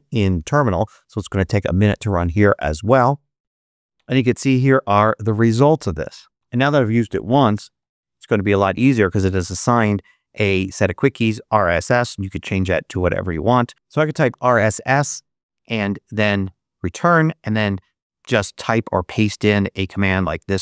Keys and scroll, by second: 6.3 super+BackSpace, 6.6-8.2 typing, 13.9 r, 14.2 s, 16.3 Return, 17.2 super+Return, 18.9 super+v, 20.4 Return.